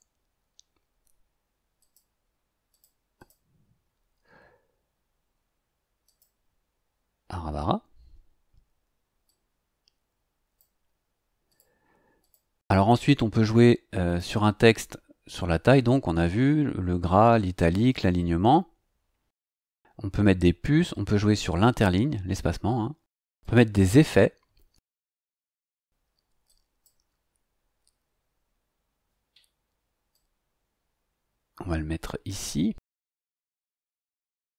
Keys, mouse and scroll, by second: 1.8 click, 2.7 click, 3.2 click, 6.0 click, 9.2-10.8 drag, 11.5 click, 12.2 click, 14.0 click, 23.4 click, 24.8 click, 26.5 click, 30.1-32.5 drag.